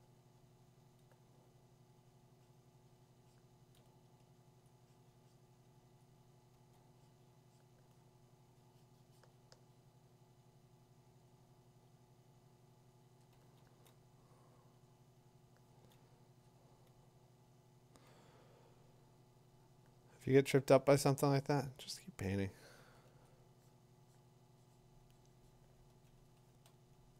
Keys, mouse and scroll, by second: 4.2 click, 4.6 click, 8.6 [, 9.2 f, 13.3 [, 13.6 [, 15.7 [, 22.2 ], 22.5 ], 22.8 ], 23.1 ], 25.9 ], 26.2 ], 26.5 ].